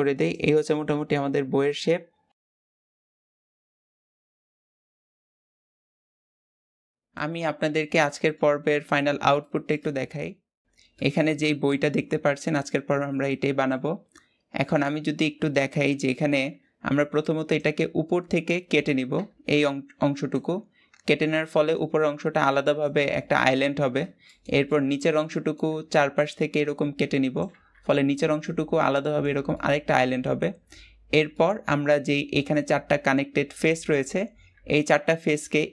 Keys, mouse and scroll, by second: 0.4-1.5 middle drag, 1.5 s, 4.4-6.8 middle drag.